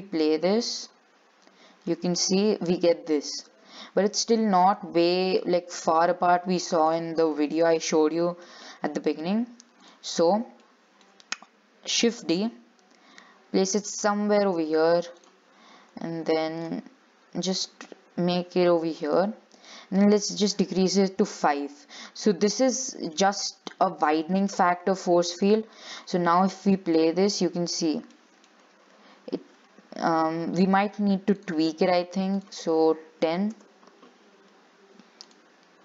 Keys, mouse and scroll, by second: 0.2 scroll down 4, 0.4-2.1 middle drag, 2.1 scroll up 3, 2.4-4.8 middle drag, 4.8 click, 5.3-5.6 scroll down 5, 5.6 shift+middle click, 6.0 scroll up 1, 6.2-7.8 middle drag, 7.8-8.3 scroll up 2, 8.3-10.0 middle drag, 10.0 click, 10.6 shift+scroll down 3, 10.9 shift+middle click, 11.4 scroll up 2, 12.2 shift+d, 15.4 click, 16.2-16.5 scroll down 5, 16.5 shift+middle click, 16.9 scroll up 4, 17.6 g, 20.2-22.7 drag, 22.7 middle click, 23.5-23.9 scroll down 3, 23.9 shift+middle click, 24.5-25.5 scroll up 1, 25.5-27.2 drag, 27.2-28.2 middle drag, 28.2 scroll down 2, 28.3 shift+middle click, 28.7 scroll up 2, 31.5-35.8 drag.